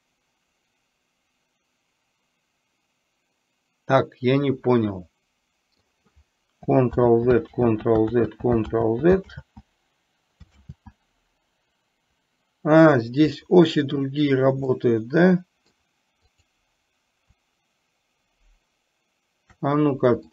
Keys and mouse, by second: 7.0 ctrl+z, 7.8 ctrl+z, 14.8-15.9 middle drag, 16.4 click.